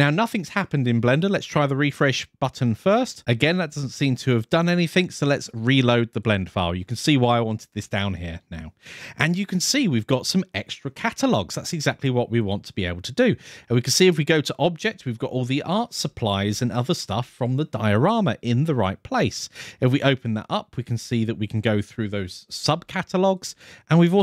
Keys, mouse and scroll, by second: 1.9 click, 3.2-3.5 scroll down 2, 3.5-4.0 scroll up 2, 4.0 click, 11.7 click, 14.9-16.1 scroll down 6, 16.4 scroll up 4, 17.0-17.4 scroll down 3, 19.1 click, 19.6-20.1 scroll down 4, 20.6 click, 21.0 click, 21.4 click, 22.5-23.2 scroll up 3, 23.2 click, 23.7 click.